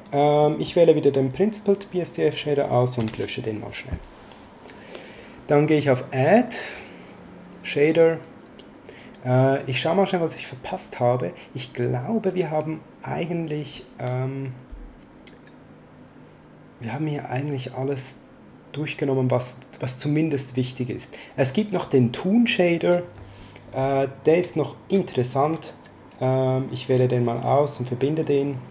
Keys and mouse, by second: 0.4 middle click, 1.0 click, 3.0 x, 5.7 click, 25.2 click, 26.8 click, 28.2 click.